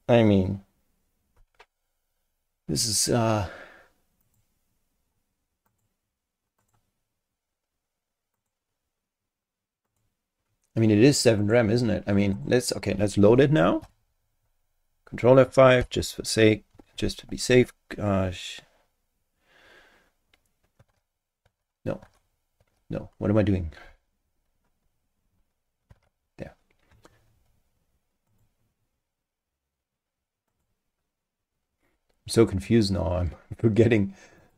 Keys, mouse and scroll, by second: 4.2 click, 5.7 click, 6.6 click, 8.3 click, 9.9 click, 11.4 click, 12.3 click, 13.8 F5, 15.8 ctrl+F5, 21.6 super+Tab, 28.3 click, 30.5 click, 34.4 click.